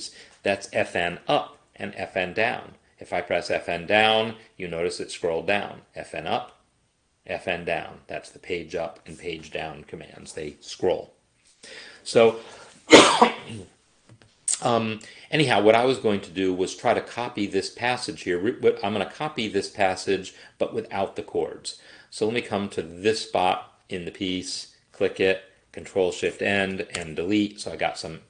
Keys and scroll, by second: 3.5 Page_Down, 6.1 Page_Up, 7.3 Page_Down, 8.9 Page_Up, 26.0 ctrl+shift+End, 27.1 BackSpace.